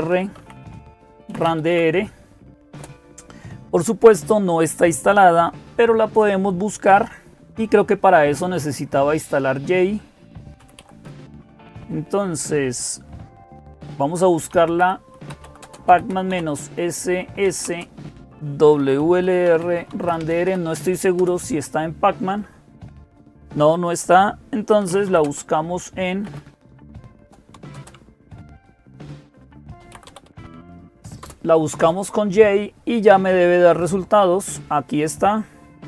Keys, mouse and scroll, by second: 0.0-35.8 typing, 2.5 Return, 20.9 Return, 31.0 Return.